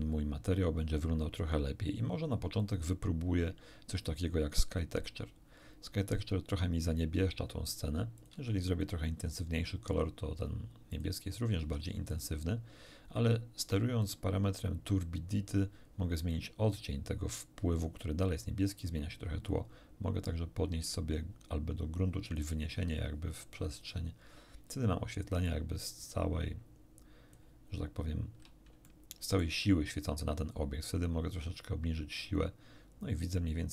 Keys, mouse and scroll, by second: 2.6 click, 4.7 click, 7.1-7.7 scroll down 2, 8.2 click, 8.3 2, 8.8 click, 10.9 click, 11.3 click, 11.6 3, 12.1 click, 14.0-16.5 drag, 19.5-22.5 drag, 25.5-27.5 drag, 28.1-28.5 scroll down 1, 28.9 shift+middle click, 31.1-33.7 drag.